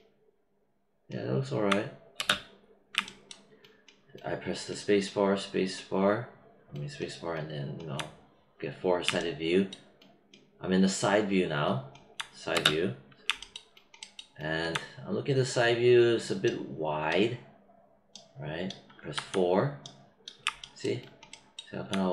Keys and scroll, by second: 2.1 space, 12.5 space, 19.1 4.